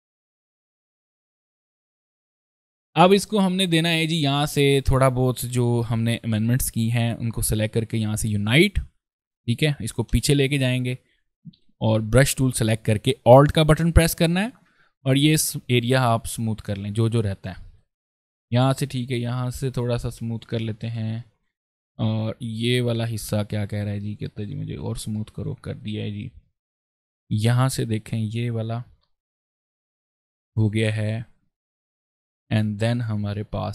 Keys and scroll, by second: 0.3 ctrl+space, 1.5 ctrl+space, 1.7 ctrl+shift+c, 2.4 v, 2.5 ctrl+space, 2.7 ctrl+s, 4.2 ctrl+space, 5.3 ctrl+space, 9.8 ctrl+shift+[, 11.3 b, 11.7 ctrl+space, 17.3 ctrl+alt+space, 20.5 ctrl+z, 20.7 ctrl+space, 22.1 ctrl+space, 23.5 ctrl+alt+space, 24.6 alt+v, 25.0 ctrl+alt+space, 26.6 ctrl+space, 27.4 ctrl+space, 28.4 b, 30.0 ctrl+alt+space, 31.4 ctrl+space, 32.4 ctrl+v.